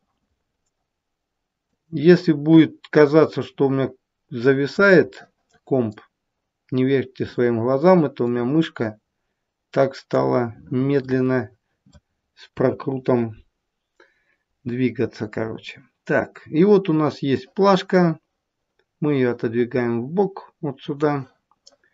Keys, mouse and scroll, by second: 1.6 click, 5.1 middle click, 8.6 click, 11.0 middle click, 12.5 KP_1, 17.3 click.